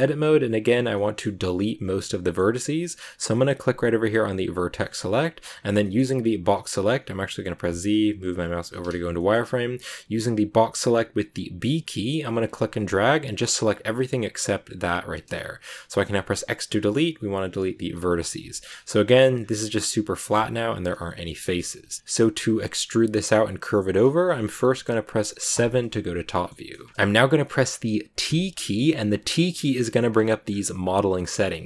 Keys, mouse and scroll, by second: 2.6-4.4 scroll up 1, 4.4 click, 4.7 middle click, 5.5 scroll down 1, 5.7-7.5 middle drag, 7.5 z, 9.1-10.5 middle drag, 10.5 b, 18.4 shift+middle click, 19.3-20.0 scroll up 2, 20.2 a, 20.8 a, 20.8 scroll down 1, 20.9 middle click, 21.3 scroll up 1, 21.8 shift+middle click, 22.2-22.6 scroll down 2, 23.7-25.4 middle drag, 25.4 KP_7, 26.2 shift+middle click, 26.9 click, 27.5 click, 28.2 t, 30.0 scroll down 2, 30.4 scroll up 1, 30.5-31.6 scroll down 1.